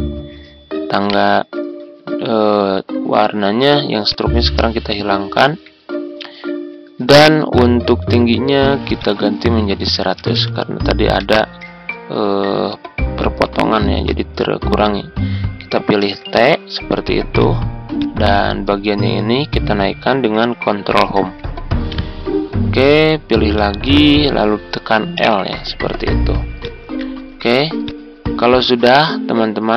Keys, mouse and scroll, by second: 1.0 right click, 4.0 click, 5.1 ctrl+scroll down 1, 7.6 ctrl+g, 8.9 click, 10.1 typing, 11.1 Return, 14.0 shift+click, 17.3 click, 21.0 Home, 23.5 shift+click, 26.5 click, 27.0-27.4 scroll up 1, 27.4 typing, 27.8-29.7 drag.